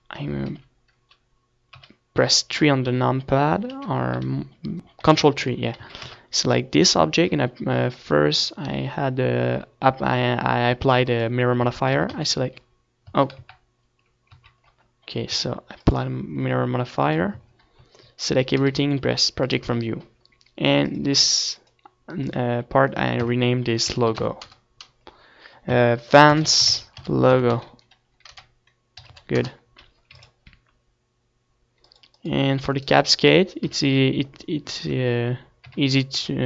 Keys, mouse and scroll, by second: 0.3 middle click, 1.5-1.8 scroll down 1, 1.8 middle click, 2.6-4.3 right drag, 3.0 Tab, 3.4 Tab, 4.1 Tab, 4.3 KP_1, 5.2 KP_Decimal, 5.6 KP_1, 6.4 KP_3, 7.0 middle click, 7.8 ctrl+KP_1, 9.8 ctrl+KP_3, 10.6 a, 10.9 a, 11.9 Tab, 16.2-17.6 drag, 16.6 Tab, 16.9 a, 17.1 a, 18.0 Tab, 18.3 ctrl+z, 19.3 ctrl+z, 20.3 Tab, 21.0-23.4 drag, 21.2 Tab, 22.2 Tab, 23.4 u, 24.4 Tab, 26.5-32.8 drag, 34.9 ctrl+s.